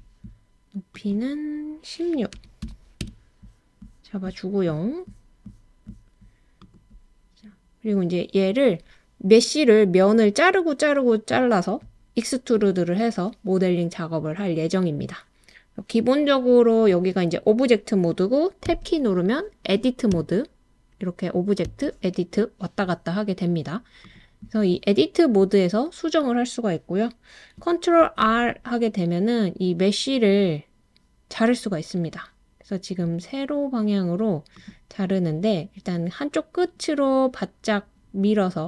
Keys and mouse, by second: 0.9-3.0 drag, 18.6 Tab, 20.1 Tab, 28.0 super+r.